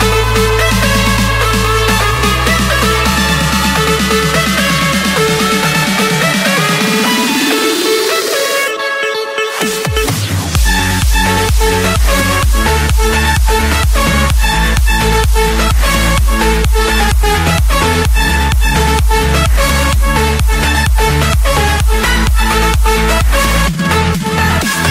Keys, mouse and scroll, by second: 0.9 click, 2.8 Escape, 5.1 click, 7.8 click, 8.3-8.9 scroll down 4, 9.0-9.5 scroll up 4, 10.1 click, 10.4 middle click, 10.5 middle click, 10.7 middle click, 13.9 click, 14.5 middle click, 14.9 Escape, 15.4 click, 15.9 click, 17.1-18.3 typing, 19.3 Return, 22.6-24.0 typing.